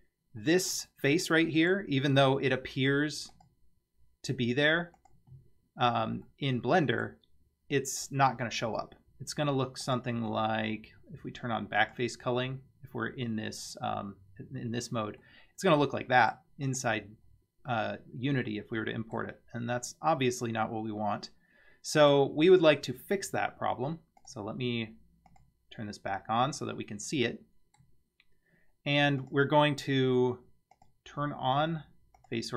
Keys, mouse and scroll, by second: 0.4-0.7 middle drag, 1.6 Tab, 2.2 Tab, 3.3-5.3 drag, 5.5 scroll down 2, 6.3-7.1 middle drag, 9.9-14.1 drag, 15.2-16.3 middle drag, 16.7 click, 17.2-17.7 scroll up 3, 17.7-19.2 middle drag, 19.3 scroll down 2, 19.7-22.1 middle drag, 24.2-25.9 drag, 27.3 middle click, 29.2 click, 30.8-32.5 drag.